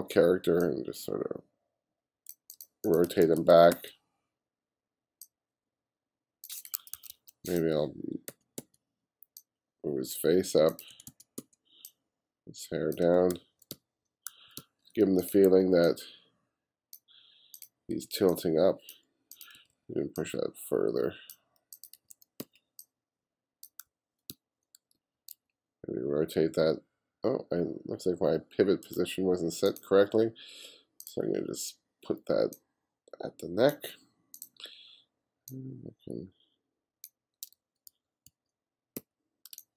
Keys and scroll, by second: 3.1 b, 7.0 2, 8.3 b, 11.0 b, 13.3-15.5 typing, 17.9 b, 19.6 b, 22.0 b, 23.9 f, 24.4 g, 25.0 b, 37.6 g, 39.0 b, 39.5 b, 39.5 space.